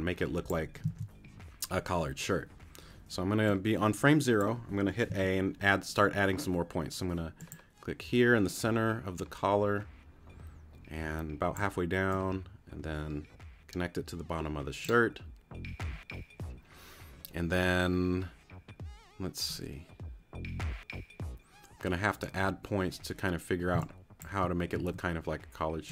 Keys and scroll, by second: 1.8 super+z, 5.1 a, 23.7 space, 24.7 a.